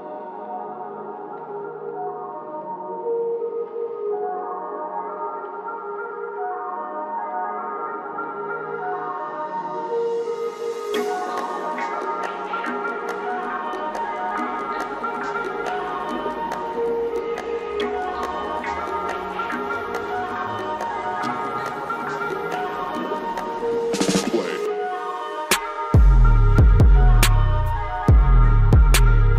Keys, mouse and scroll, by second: 4.3-7.9 drag, 7.9-8.3 scroll up 1, 8.3-9.7 drag, 9.7-10.0 scroll down 1, 13.4 click, 16.5 click, 16.5 typing, 21.0-27.5 drag.